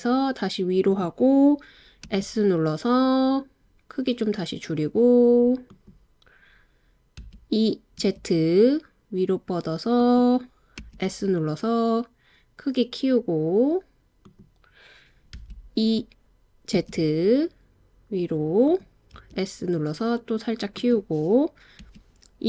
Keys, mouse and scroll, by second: 0.9 click, 2.1 s, 5.7 click, 7.2 e, 8.0 z, 10.0 click, 10.8 s, 14.2 click, 15.4 e, 16.8 z, 18.7 click, 19.2 s, 20.7 click, 21.8 e.